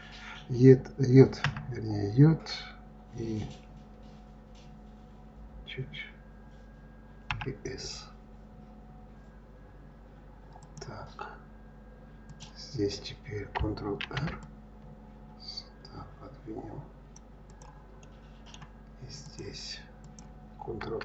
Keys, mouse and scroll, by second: 12.3 click, 14.0 ctrl+r, 17.4 click, 18.0-19.2 middle drag, 19.2 click, 19.9 click.